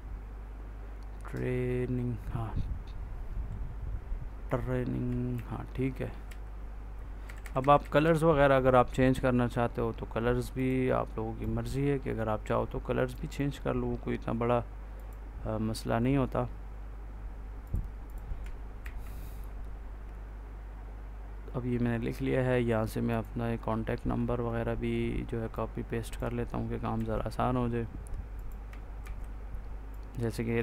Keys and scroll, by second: 5.2 ctrl+s, 6.2 Right, 18.7 ctrl+s, 26.8 ctrl+c, 28.9 ctrl+v.